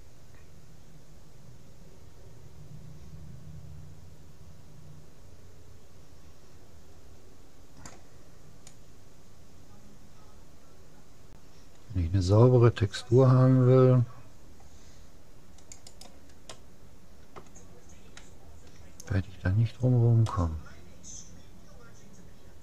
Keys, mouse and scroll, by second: 16.0 right click, 16.5-17.8 drag, 16.8-18.2 middle drag, 19.5-22.0 middle drag.